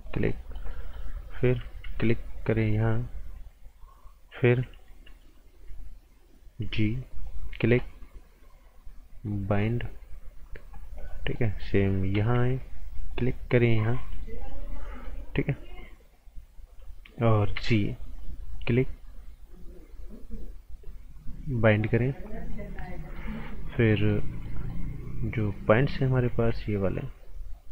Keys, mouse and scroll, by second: 0.3 right click, 1.8 b, 2.6 click, 6.5 g, 7.1 click, 11.3 right click, 12.2 b, 13.1 click, 14.4 right click, 17.5 g, 18.2 click, 21.2 click, 22.5 right click, 24.2 scroll up 1, 24.4 right click, 26.3 g.